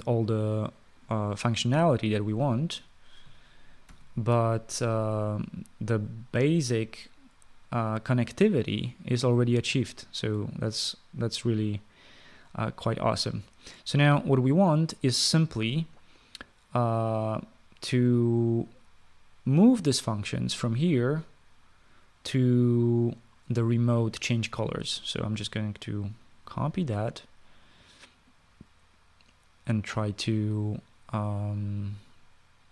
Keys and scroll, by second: 4.7 ctrl+s.